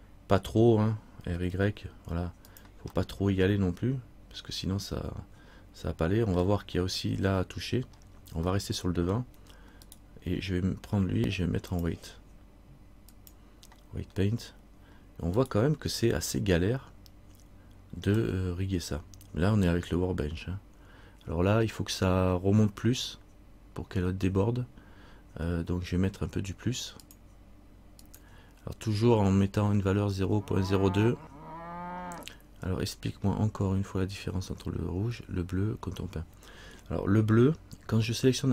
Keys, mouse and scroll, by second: 1.4 r, 3.1 middle click, 8.2-8.6 scroll down 1, 8.7 middle click, 10.0 right click, 11.9 click, 13.5 click, 14.3 scroll up 1, 15.6 right click, 15.6-16.3 scroll up 2, 16.4 middle click, 27.2 click.